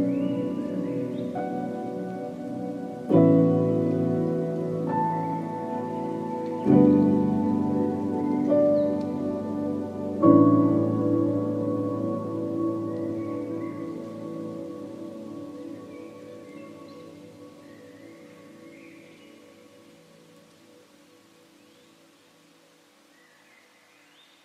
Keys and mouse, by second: 3.1 shift+click, 4.3 ctrl+e, 5.2 a, 5.9 click, 7.4 3, 9.7 shift+click, 11.0-12.5 drag, 12.5 Tab, 12.6 drag, 13.0 a, 13.3 ctrl+s, 13.3-13.8 ctrl+drag, 13.9-14.3 drag, 15.1 shift+drag, 16.2 h, 16.7 Tab, 17.0-18.5 drag, 18.8 click, 19.4 ctrl+z, 19.5 ctrl+z, 20.2 ctrl+z, 20.7 ctrl+z, 20.9 ctrl+z, 21.3 ctrl+z, 22.2-22.9 drag, 23.1 ctrl+z, 23.3 ctrl+z, 23.5-24.4 ctrl+z.